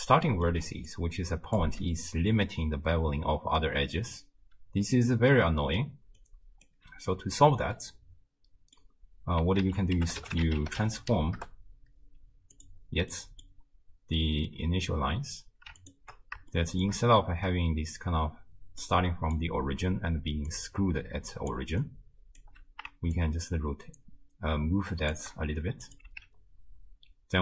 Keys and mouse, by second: 0.6 d, 0.9 click, 1.6 d, 1.7 d, 5.8 d, 6.2 right click, 6.7 d, 6.8 d, 7.7 middle click, 8.3 click, 8.4 middle click, 9.7 ctrl+a, 13.2 click, 15.8 ctrl+shift+click, 16.7 shift+click, 18.7-19.9 d, 18.8 click, 20.2-21.8 d, 20.5-21.6 drag, 21.8 click, 22.4 d, 22.5 d, 23.2-25.1 shift+drag, 26.1 x.